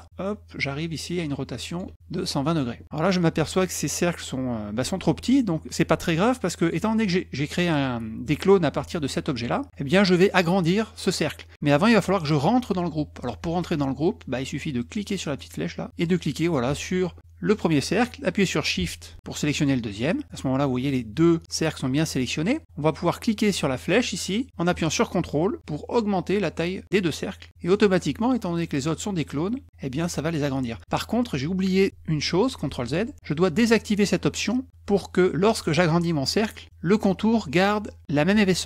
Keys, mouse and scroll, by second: 28.3 click.